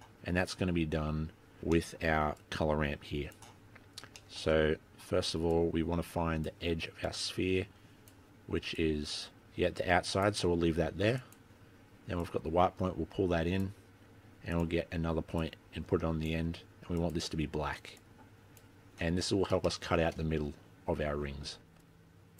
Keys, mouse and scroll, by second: 0.7 scroll down 5, 0.8 scroll up 1, 0.9-1.5 scroll down 4, 1.2-2.6 scroll up 18, 1.8 middle click, 2.4 click, 3.7-4.1 scroll up 2, 4.3 shift+middle click, 5.0 scroll down 1, 5.7 click, 7.1 click, 8.9 click, 11.3 click, 12.3 click, 14.6 click, 15.5 click, 17.1 click, 19.4-19.8 scroll up 4, 19.8 shift+middle click, 21.9 click.